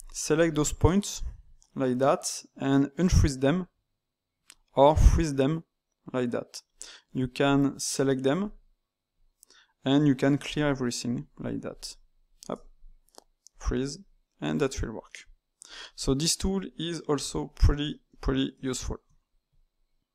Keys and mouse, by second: 0.2 shift+click, 0.5 shift+click, 0.9 ctrl+right click, 3.0-7.4 drag, 8.4-11.7 drag, 12.2 ctrl+shift+click, 13.5-14.1 drag, 14.1-19.0 middle drag, 19.0 Tab.